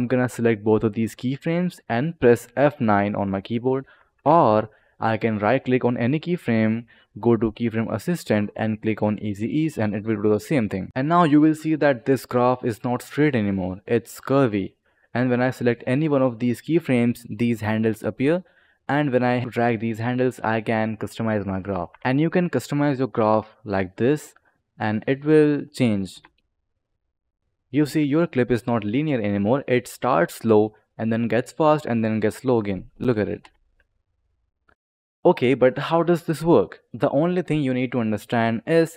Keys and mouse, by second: 0.1 click, 2.7 F9, 4.3 ctrl+z, 5.4 click, 9.8 click, 10.6-10.9 click, 15.1 click, 16.3 click, 18.3 click, 19.4 click, 20.8 click, 21.7 ctrl+z, 21.9 ctrl+z, 22.2 click, 23.9 click, 25.3 click, 26.0 space, 33.3 space, 34.7 click, 36.4-36.9 drag.